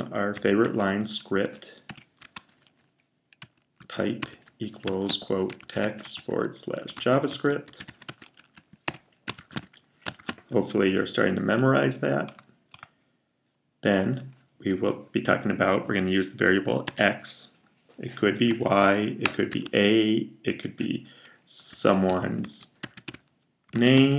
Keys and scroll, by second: 0.0-10.0 typing, 16.7 typing, 18.1-19.4 typing, 21.4-24.1 typing.